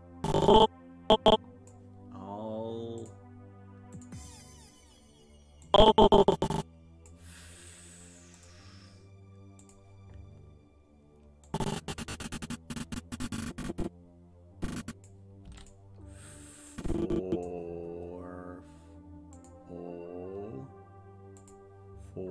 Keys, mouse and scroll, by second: 3.0 click, 3.9 click, 5.7-7.1 drag, 8.4 click, 9.6 click, 11.5-15.1 drag, 15.5 i, 16.7 click, 19.4 click, 21.4 click.